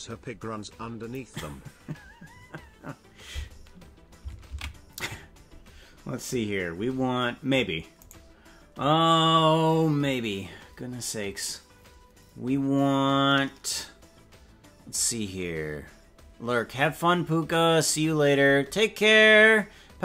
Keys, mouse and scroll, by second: 6.0 ctrl+s, 8.2 right click.